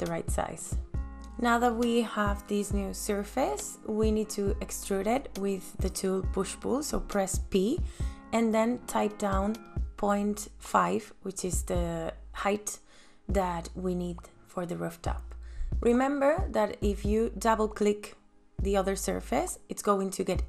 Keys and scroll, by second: 2.4 space, 6.2 ctrl+s, 8.1 p, 15.6 ,, 15.9 KP_Enter.